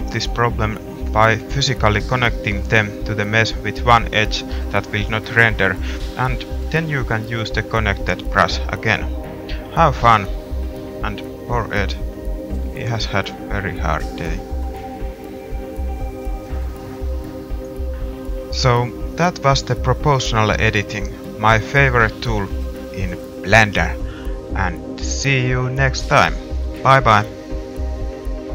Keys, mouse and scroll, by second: 0.2 middle click, 0.5 middle click, 1.3 click, 1.8 g, 3.1 click, 4.0 r, 5.9 middle click, 6.4 r, 8.3-11.4 middle drag, 12.4 middle click, 13.2 middle click, 14.0-15.0 middle drag, 15.1 middle click, 17.6 middle click, 17.8 middle click, 19.4 middle click, 19.6 middle click, 20.3 middle click, 20.5 middle click, 22.5 middle click, 23.5 middle click, 24.8-25.8 middle drag.